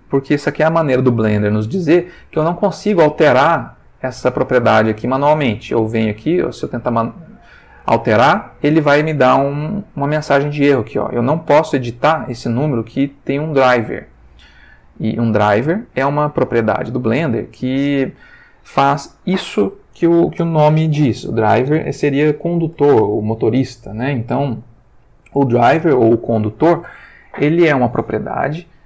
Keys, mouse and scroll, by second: 2.6-5.1 drag, 5.6 click, 7.4 click, 14.5 click.